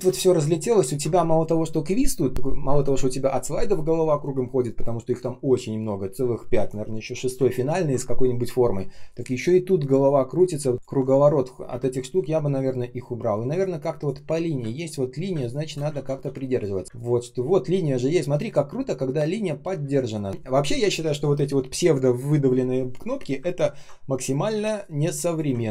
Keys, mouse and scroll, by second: 0.1 ctrl+scroll down 1, 0.7-1.8 ctrl+scroll up 1, 7.6-8.7 ctrl+scroll down 1, 9.7 shift+click, 10.3 shift+click, 10.7 space, 11.6 Delete, 14.5-18.1 typing, 15.8 ctrl+z, 19.7 space, 20.2 space, 20.2 space, 23.5 ctrl+scroll down 1, 24.4 space, 24.9 space, 25.0 space, 25.6 ctrl+scroll up 1.